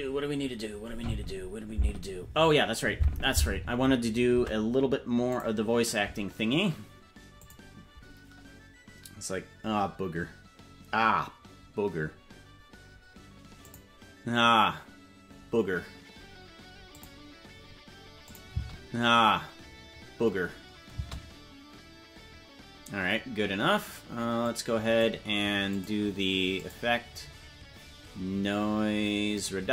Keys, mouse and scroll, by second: 4.6 ctrl+Tab.